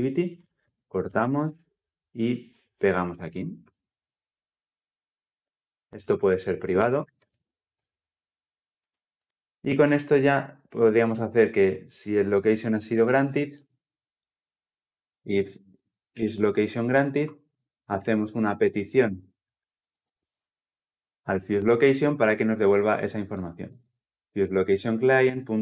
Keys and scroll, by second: 0.5 ctrl+x, 7.0 alt+Return, 9.2 ctrl+alt+o, 16.9 Return, 19.8 ctrl+alt+l, 23.8 ctrl+alt+o, 24.3 Return.